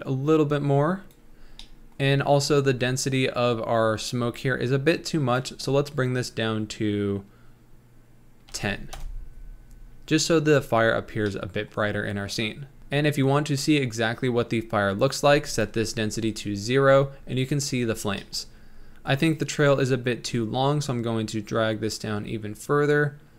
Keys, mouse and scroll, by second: 1.5-1.9 scroll down 5, 1.9 middle click, 2.1-3.0 scroll up 4, 5.6-8.9 drag, 11.1-11.6 scroll down 2, 11.7 middle click, 12.1-12.8 scroll up 2, 12.8-16.0 middle drag, 16.0 click, 17.3-18.0 scroll down 3, 18.2 middle click, 18.4-19.0 scroll up 3, 19.1-23.3 drag.